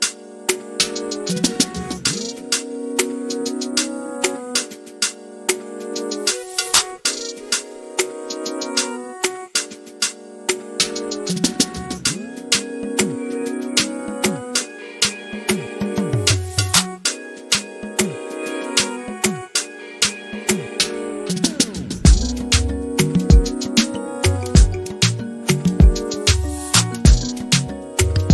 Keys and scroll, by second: 2.2 t, 6.6-7.5 typing, 10.8 r, 11.9 typing, 13.2 p, 23.1-24.6 typing, 25.8 m, 27.6-28.3 typing.